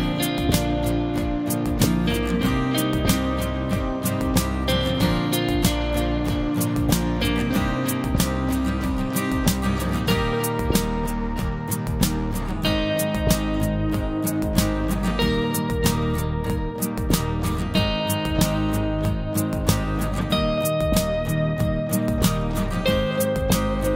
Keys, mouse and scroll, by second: 0.7 click, 1.2 scroll down 1, 3.5 [, 4.5 click, 5.3-6.2 typing, 5.4 scroll down 1, 6.2 scroll up 1, 7.2 click, 7.9 scroll down 1, 8.7 click, 9.5 scroll down 1, 12.6 scroll down 1, 12.6 scroll up 1, 15.1 click, 16.2 scroll down 1, 16.6 typing.